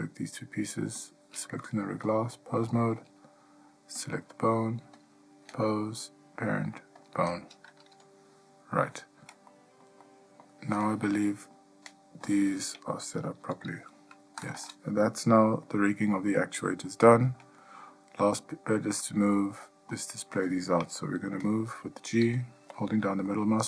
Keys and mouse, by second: 1.2 shift+click, 2.3-2.9 drag, 5.1-7.3 drag, 9.1-9.5 ctrl+middle drag, 9.7-10.0 middle drag, 10.2-10.6 middle drag, 10.9-11.7 middle drag, 12.5 click, 13.6 g, 15.8-16.4 ctrl+middle drag, 16.8 middle drag, 17.3 shift+middle drag, 17.8 middle drag, 18.7-19.4 ctrl+middle drag, 22.4 g.